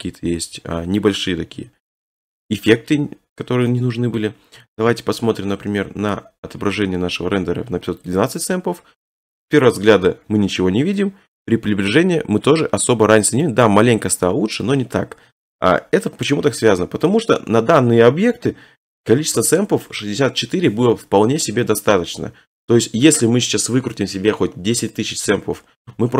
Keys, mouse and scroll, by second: 1.5 scroll, 2.1 click, 2.2-3.2 click, 3.1 click, 4.2 middle click, 4.5 click, 4.7 click, 5.0 click, 5.2 click, 5.3-6.2 scroll, 8.2 click, 10.1-10.6 scroll, 11.3 middle click, 11.5 click, 12.7 click, 12.8 click, 13.5 click, 14.2 click, 14.3 click, 14.9 scroll, 15.5 middle click, 15.8-16.4 scroll, 17.0-17.7 middle click, 17.8 middle click, 18.1 middle click, 18.3 middle click.